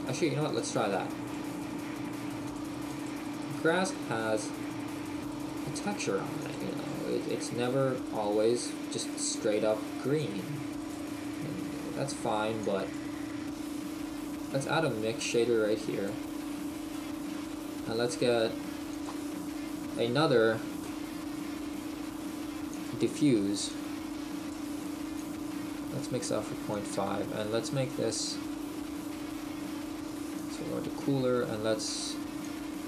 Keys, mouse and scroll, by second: 2.1 click, 2.5 click, 8.7-12.1 scroll down 8, 9.3 shift+middle click, 13.0 click, 13.0-13.4 scroll up 7, 15.1 click, 24.1 click.